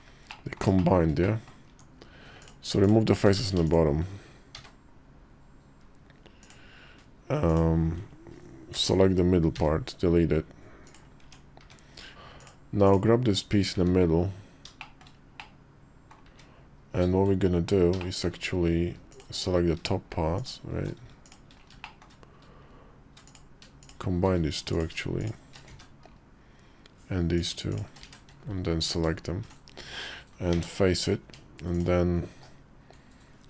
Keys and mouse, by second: 0.2 middle click, 0.7 shift+click, 1.1 middle click, 1.4 Tab, 3.1 ctrl+z, 3.5 shift+click, 4.3 x, 8.5 ctrl+l, 9.3 x, 11.0 Tab, 11.4 `, 12.0 /, 12.2 ctrl+z, 12.6 click, 13.5 `, 14.5 shift+middle click, 15.1 middle click, 16.0 `, 16.9 Tab, 17.8 shift+middle click, 17.9 shift+click, 20.1 alt+shift+click, 21.0 shift+click, 21.6 shift+middle click, 23.0 click, 24.5 click, 24.9 shift+click, 25.4 1, 27.1 click, 27.8 1, 28.5 alt+click, 30.3 f, 31.0 Tab, 31.5-33.3 drag.